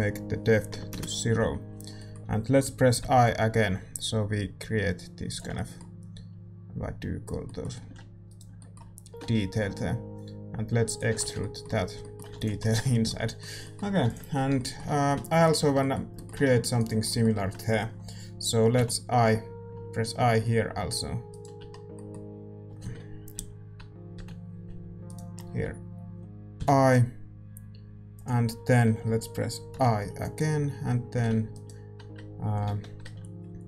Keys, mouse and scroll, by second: 1.9-15.4 middle drag, 7.7 a, 8.2-10.1 right drag, 9.1 e, 11.3 Tab, 11.9 a, 12.5 ctrl+s, 15.4-18.7 right drag, 15.5 Tab, 16.4 a, 18.7-20.4 middle drag, 21.7-25.0 middle drag, 22.8 ctrl+z, 23.3 KP_1, 23.7 KP_3, 25.0-28.1 right drag, 25.2-28.1 middle drag, 26.5 i, 29.7 i, 31.1 s, 32.6 ctrl+z.